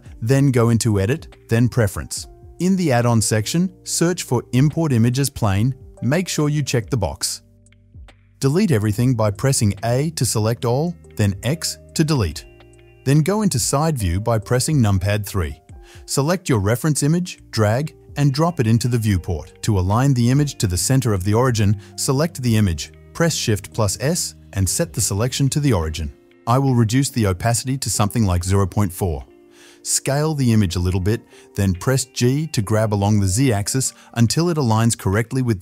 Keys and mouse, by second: 10.0 a, 11.1 x, 13.6 KP_3, 19.2-27.4 middle drag, 19.2 shift+s, 23.4 shift+s, 27.4 click, 27.5-28.3 middle drag, 28.3 click, 28.4-28.8 middle drag, 28.8-32.0 drag, 30.5 s, 32.0-35.6 middle drag, 33.6 g.